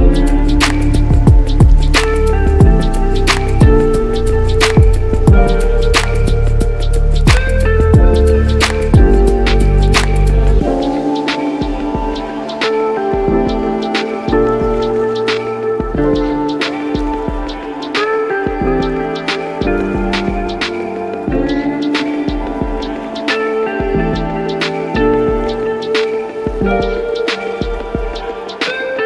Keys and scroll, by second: 1.4 ctrl+z, 4.4 ctrl+z, 11.6 ], 12.1 x, 13.1 x, 20.2 ctrl+s.